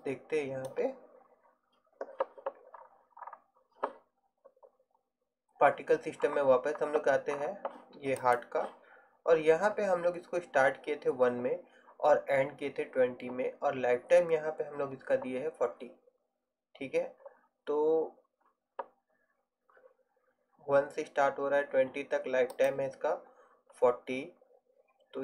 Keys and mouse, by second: 0.0-2.1 drag, 8.3-22.6 right drag, 22.6-24.6 drag.